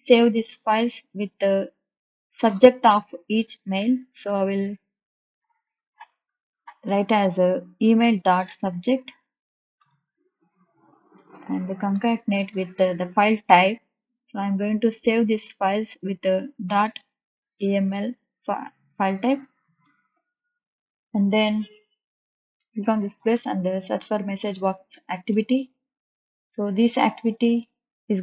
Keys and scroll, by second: 1.2 Return, 2.5 ., 6.8 s, 8.5 u, 9.8 Return, 11.1 space, 11.7 shift+=, 12.3 space, 14.9 shift+', 16.6 ., 17.3 e, 17.5 m, 17.8 l, 23.1 m, 23.3 e, 24.1 s, 25.3 Return.